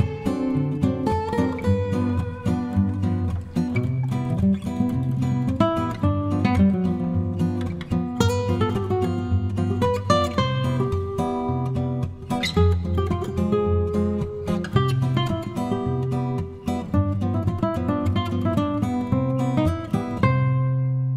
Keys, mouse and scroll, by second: 3.0-5.5 shift+drag, 5.8-6.8 shift+drag, 7.2 shift+click, 7.9 shift+click, 10.2 -, 11.0 click, 12.0 click, 12.4 click, 12.8 click, 15.8 click, 17.5 click, 18.3 click, 19.2 click, 19.8-21.1 drag.